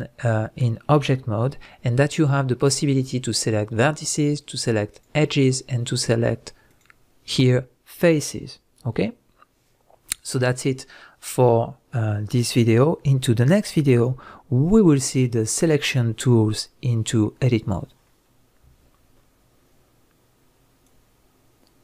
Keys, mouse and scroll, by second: 4.9 click, 6.7 click.